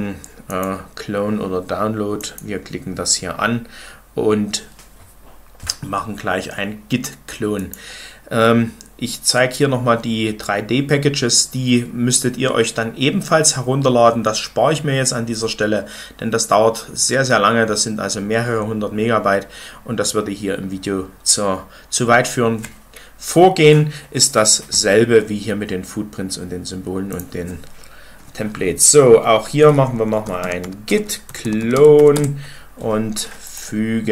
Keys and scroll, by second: 30.1-32.4 typing.